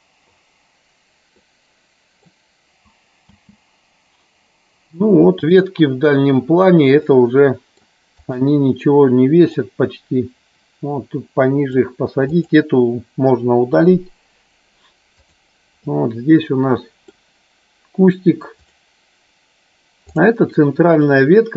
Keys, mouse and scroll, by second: 1.5-2.5 middle drag, 3.5 space, 7.1-8.0 middle drag, 8.4 click, 9.6-11.9 drag, 12.5 click, 13.9 Delete, 15.2 click, 15.9-17.4 middle drag, 18.5 click, 21.2-21.5 middle drag.